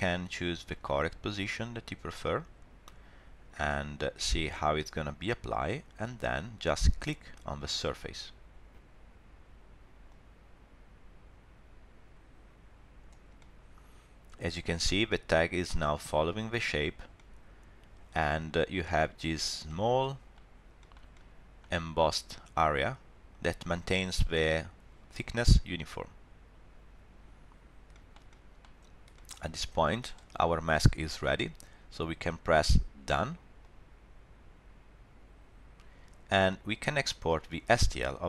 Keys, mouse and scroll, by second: 0.3 scroll up 1, 0.7 shift+middle click, 1.0 middle click, 1.5 scroll down 1, 3.6 f, 8.7 click, 12.2 click, 13.4 middle click, 17.2 middle click, 19.3 scroll up 2, 19.7 shift+middle click, 20.0 middle click, 20.4 scroll up 2, 20.8 shift+middle click, 21.1 middle click, 22.2 middle click, 22.4 shift+middle click, 24.0 middle click, 27.4-27.9 scroll down 3, 27.9 shift+middle click, 28.3 middle click, 29.1 shift+middle click, 29.4 middle click, 29.6 shift+middle click, 33.6 click.